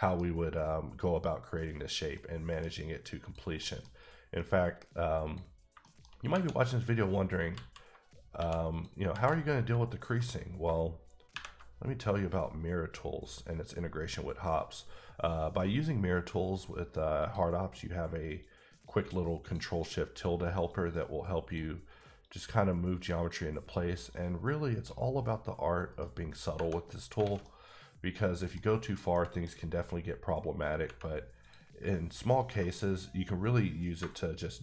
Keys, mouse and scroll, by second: 0.8 scroll up 2, 2.1 middle click, 3.2 click, 3.6 middle click, 3.9 scroll up 2, 4.4 middle click, 5.2 click, 5.5 scroll down 2, 5.8 shift+middle click, 6.1 shift+scroll up 2, 7.5 alt+z, 8.4 1, 8.7 click, 9.1 alt+z, 9.9 ctrl+click, 11.3 ctrl+shift+`, 12.1-12.8 scroll up 2, 12.8-13.8 scroll down 1, 13.8-15.0 scroll down 3, 15.0-16.2 scroll up 1, 16.2-17.2 scroll down 1, 17.2 click, 18.4 click, 20.6 click, 22.2 click, 24.1 click, 25.9 right click, 27.0 scroll down 1, 27.2 a, 27.4 middle click, 28.9 click, 29.1 middle click, 29.7 scroll up 2, 31.4 click.